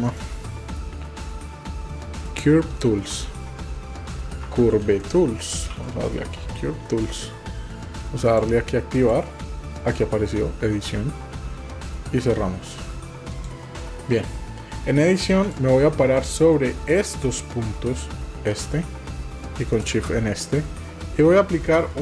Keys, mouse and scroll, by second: 15.4 click, 18.5 click, 19.7 shift+click, 21.9 click.